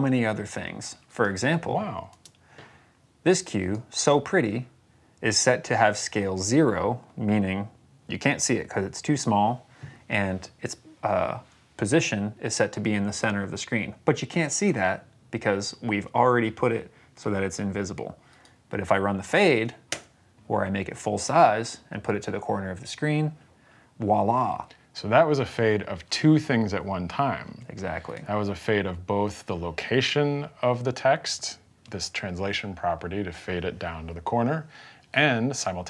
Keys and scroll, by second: 2.0 space, 19.8 space.